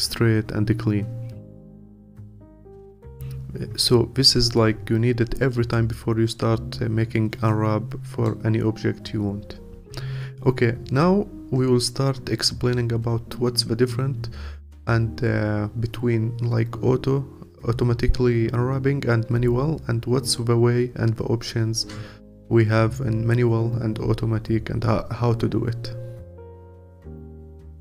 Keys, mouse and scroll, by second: 2.9-5.6 scroll down 2, 5.6-27.8 scroll down 1.